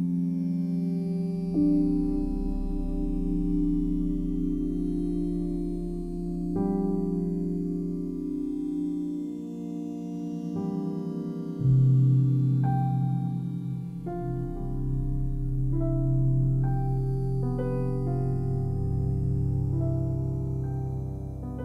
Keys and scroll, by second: 4.8 ctrl+z, 5.6 c, 11.3 alt+q, 14.9 ctrl+v, 16.9 ctrl+z, 17.5 f.